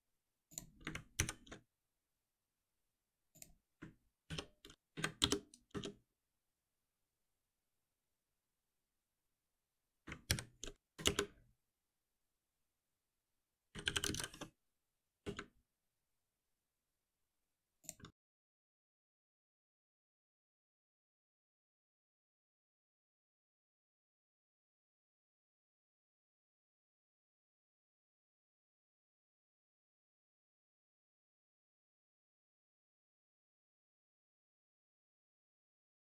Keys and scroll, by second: 1.1 ctrl+alt+n, 4.2 shift+F6, 10.2 ctrl+alt+m, 18.1 ctrl+alt+b, 20.0 ctrl+alt+p, 23.9 ctrl+F6.